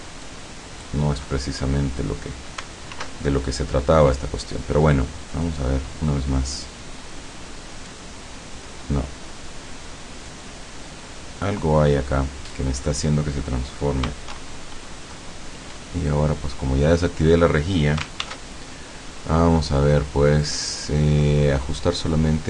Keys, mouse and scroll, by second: 0.3 click, 1.3 scroll up 2, 3.0 alt+F4, 8.0-12.2 drag, 14.4 shift+3, 18.2 ctrl+shift+d, 20.4 click.